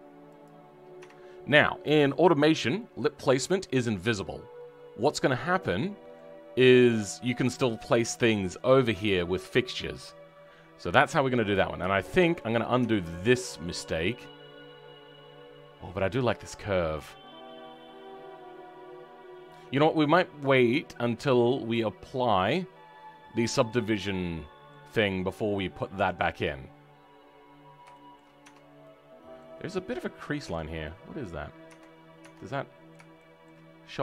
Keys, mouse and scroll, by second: 0.9 Tab, 1.1-1.4 scroll down 2, 1.4 middle click, 2.2 click, 2.2-2.7 scroll up 4, 2.7-10.0 middle drag, 10.0-10.4 scroll down 5, 12.0 middle click, 12.3-12.7 scroll up 5, 12.7 Tab, 13.0-23.8 middle drag, 23.8-24.1 scroll down 4, 24.1 middle click, 24.9 scroll up 3, 25.2-26.9 middle drag, 26.9-27.8 scroll up 3, 27.8 shift+middle click, 28.3 Tab, 28.5 scroll down 4, 28.7 middle click, 29.5-30.3 scroll up 3, 30.7 middle click, 32.1 Tab, 32.4-33.5 middle drag, 33.5 scroll up 2, 33.9-34.0 right drag.